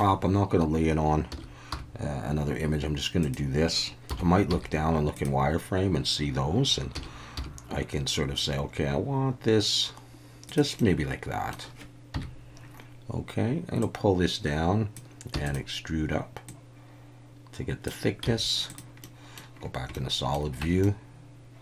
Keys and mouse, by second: 1.3 s, 1.7 y, 3.2 click, 4.1 KP_7, 4.5 z, 6.9 s, 7.4 y, 10.5 click, 10.8 middle click, 12.1 KP_1, 13.8-14.9 drag, 15.4 click, 16.5-17.9 drag, 18.2 z, 19.0 middle click, 19.9 middle click, 20.6 Tab, 20.8-21.6 middle drag.